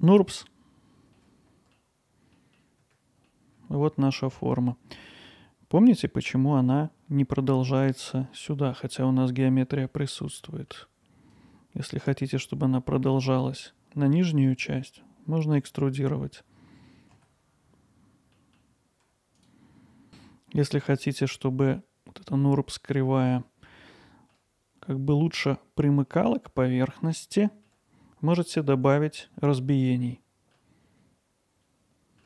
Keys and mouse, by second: 1.2 alt+middle click, 2.4 middle click, 3.3-4.4 alt+middle drag, 5.0 alt+middle click, 8.3 alt+middle click, 9.9 middle click, 10.4 alt+middle click, 11.5 click, 17.4 middle click, 18.3 alt+middle click, 19.2 middle click, 19.4 alt+middle click, 20.2 alt+middle click, 23.7 alt+middle click, 27.0 alt+middle click, 30.6 alt+middle click, 31.4 click.